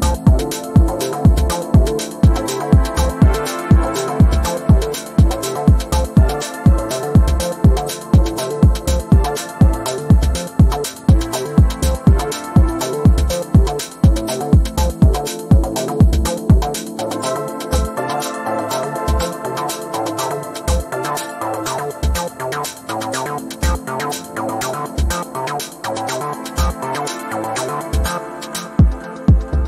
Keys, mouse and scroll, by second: 0.2 click, 1.4-1.8 ctrl+scroll down 1, 2.0 click, 2.7 shift+click, 3.6 ctrl+scroll up 1, 5.1 ctrl+scroll up 1, 5.6 shift+click, 6.1-6.4 ctrl+scroll down 1, 7.4 shift+click, 8.3-10.2 ctrl+drag, 15.4-16.7 typing, 17.8 click, 20.7-21.3 ctrl+scroll up 1, 21.3 click, 23.7 click, 25.0 ctrl+c, 25.5 click, 25.8 r, 26.2-27.1 drag, 29.1 ctrl+v.